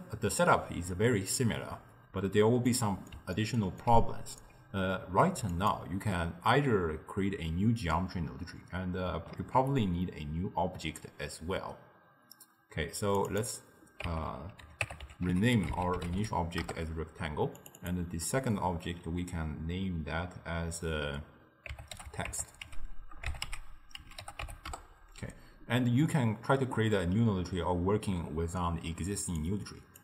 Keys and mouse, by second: 2.7-5.6 middle drag, 5.6 click, 9.5 shift+d, 13.2-16.5 drag, 17.6 click, 17.8-20.9 drag, 29.5 click.